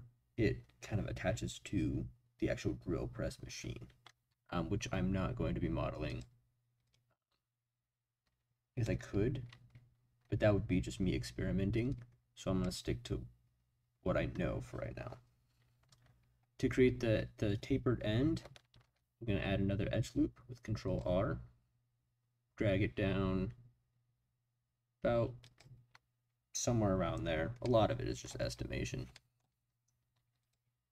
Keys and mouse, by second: 6.1 click, 6.9-8.8 drag, 11.9 click, 18.8 ctrl+r, 25.4 click, 27.6 middle click, 29.1 middle click.